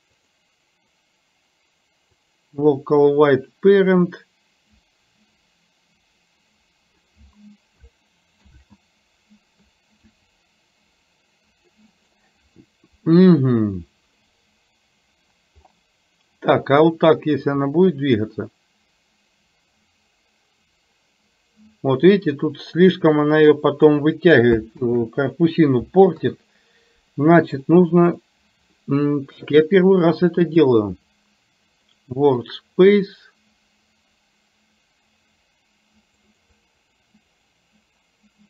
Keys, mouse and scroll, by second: 0.2-2.5 drag, 3.6-7.0 drag, 15.9 middle click, 17.7-24.0 drag, 26.2 KP_3, 27.7 shift+middle click, 30.6-32.1 drag, 36.4 click, 36.6 click, 37.1 click, 37.4 click.